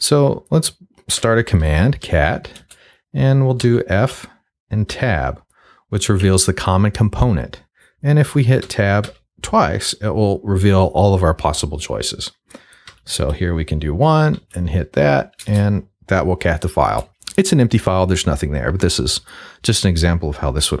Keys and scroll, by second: 0.9-3.6 typing, 4.9 Tab, 8.6 Tab, 12.9 1, 14.3 Tab, 15.4 Return.